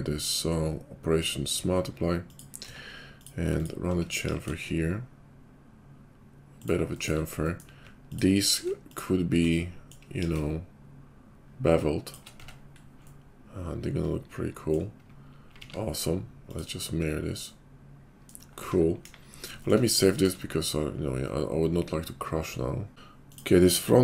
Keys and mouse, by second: 2.6 Tab, 3.5 alt+click, 4.2 ctrl+b, 7.2 middle click, 8.0 alt+click, 8.1-15.7 alt+middle drag, 10.2 ctrl+b, 12.3 Tab, 15.5 alt+x, 15.7 click, 16.6-22.9 middle drag, 19.0 KP_5, 22.9 click, 23.3-24.0 middle drag.